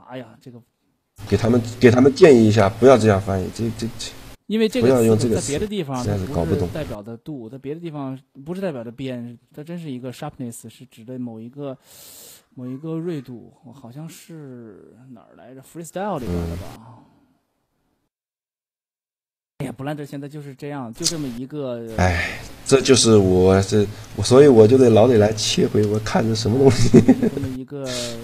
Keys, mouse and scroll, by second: 2.5-4.1 middle drag, 4.9 Tab, 6.4 Tab, 8.2 shift+g, 16.2-18.9 middle drag, 19.1-21.3 middle drag, 21.7 middle click, 23.9 right click.